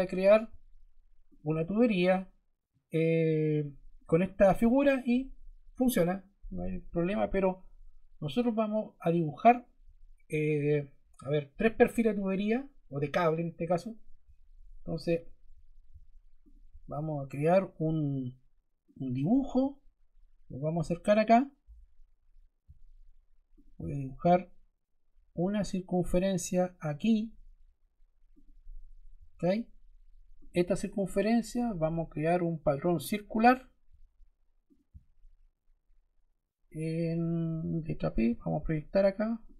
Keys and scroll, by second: 29.1 Escape, 38.2 p.